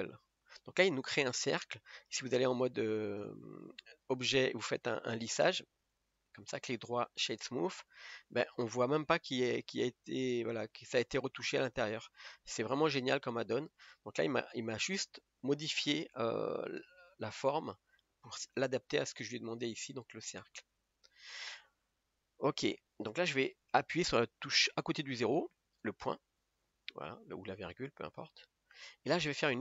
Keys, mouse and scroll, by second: 2.1 Tab, 3.1-4.9 right drag, 4.9 Tab, 5.9 Tab, 6.4-9.4 right drag, 9.4-12.5 middle drag, 12.5 Tab, 13.3-15.0 middle drag, 15.0-18.0 scroll up 1, 20.8 scroll down 1, 21.1 middle click, 21.7-22.0 scroll up 3, 22.0-25.1 middle drag, 25.6 KP_Decimal, 27.2-27.5 scroll down 1, 27.5-29.6 middle drag.